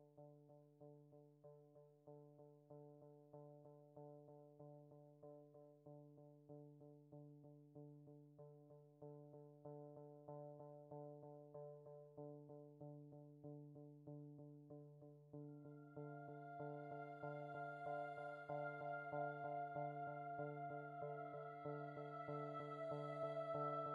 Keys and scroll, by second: 6.7 space, 9.2 space, 20.0 space, 21.1 space.